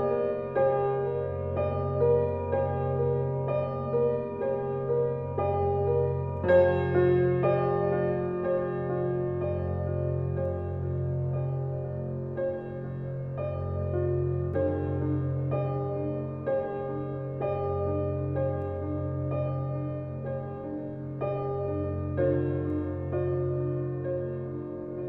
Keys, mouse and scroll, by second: 1.8 Tab, 2.0 scroll down 4, 2.3-4.4 middle drag, 4.4 scroll up 2, 4.6-5.0 shift+middle drag, 5.0-5.3 scroll up 1, 5.3-6.8 middle drag, 7.3 Tab, 8.3 click, 8.8 click, 9.3 shift+click, 9.9 shift+click, 10.5 shift+middle click, 11.2 shift+click, 11.6-12.1 scroll down 2, 12.2 alt+middle click, 12.8 click, 13.3-14.6 middle drag, 14.6 scroll up 1, 14.9 click, 15.3 click, 16.1 middle click, 17.5 scroll up 1, 17.6 click, 18.1-19.4 middle drag, 19.4 click, 19.9 Tab, 20.4-21.4 middle drag, 21.4 drag, 21.7 x, 22.1 click, 22.5 shift+d, 23.7-24.0 scroll down 4, 24.0-24.9 middle drag, 24.9 click.